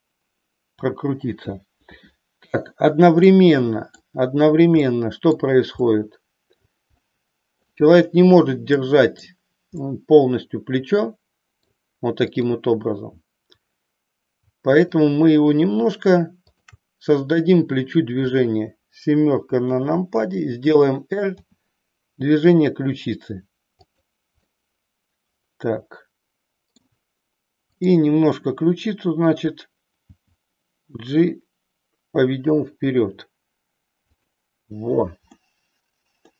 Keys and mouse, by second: 3.1 middle click, 4.8 middle click, 5.9 middle click, 7.0 middle click, 8.7 middle click, 9.8-11.7 middle drag, 12.3 click, 14.8-15.8 shift+drag, 19.8 KP_7, 21.4 r, 23.9 click, 24.5-26.8 middle drag, 30.1 g, 35.3-36.3 middle drag.